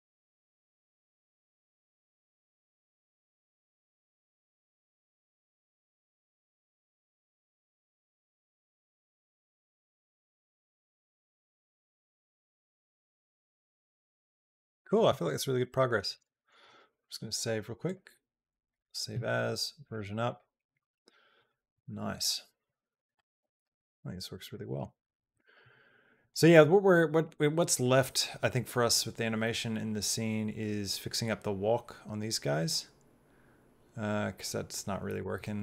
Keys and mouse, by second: 16.0 space, 18.6 click, 24.3 middle click, 25.1 middle click, 26.2-35.0 drag, 35.2 middle click.